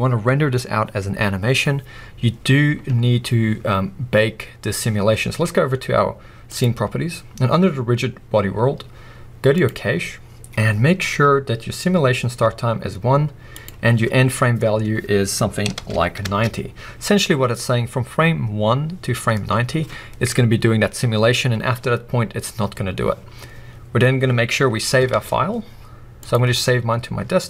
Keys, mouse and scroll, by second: 6.5 click, 9.5-27.4 drag, 9.9-13.6 scroll down 2, 16.4 Return, 25.2 ctrl+s.